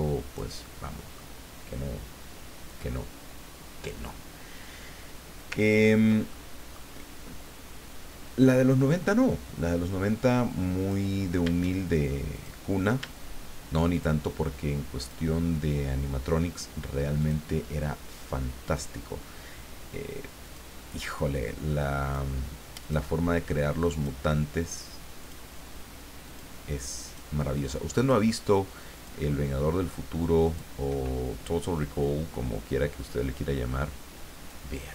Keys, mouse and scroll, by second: 0.7 middle click, 5.6 ctrl+scroll down 1, 6.3 ctrl+middle click, 10.8 click, 12.3 click, 13.9 shift+click, 15.0 shift+click, 17.2 shift+click, 18.6 shift+click, 20.4 shift+click, 22.0 shift+click, 22.8 shift+click, 23.9 shift+click, 25.2 shift+click, 26.3 shift+click, 27.0 shift+click, 28.0 shift+click, 29.0 shift+click, 30.4 shift+click, 32.0-34.6 drag.